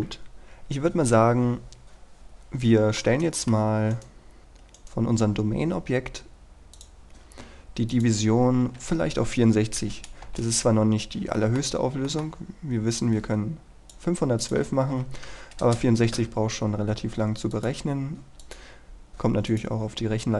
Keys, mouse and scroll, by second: 1.4 scroll down 1, 1.6 scroll up 1, 1.9 Escape, 2.4-3.1 scroll up 1, 3.1 middle click, 4.0 right click, 4.4-4.9 scroll up 1, 4.9 right click, 6.9 click, 8.9 KP_6, 10.4 Return, 11.5 middle click, 13.1-14.3 drag, 14.9 KP_6, 15.8 Return, 16.5-17.6 scroll down 1, 17.6 click.